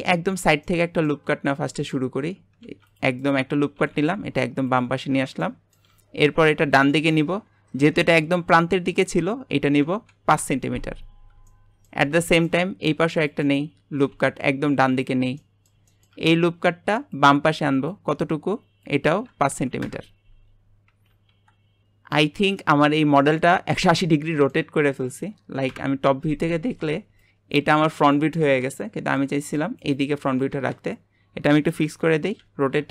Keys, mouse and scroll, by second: 0.4 scroll down 2, 0.6 middle click, 1.3-1.7 scroll up 1, 1.7 shift+middle click, 2.1-2.6 scroll up 1, 2.6 ctrl+r, 3.8 g, 5.0 scroll up 2, 5.4 middle click, 5.9 w, 6.2 scroll up 1, 7.2 click, 8.2 shift+middle click, 9.0-11.1 drag, 11.1-11.4 scroll down 1, 11.4 shift+middle click, 12.0 scroll down 1, 12.3 shift+middle click, 12.9 ctrl+r, 13.9 g, 15.4 middle click, 16.2 scroll up 2, 17.1 click, 18.8-20.5 drag, 20.5-20.9 scroll down 3, 20.9 Tab, 21.2 KP_7, 22.5-25.6 middle drag, 25.6 KP_7, 28.7-31.5 middle drag, 31.5-32.4 scroll up 2, 32.4 r.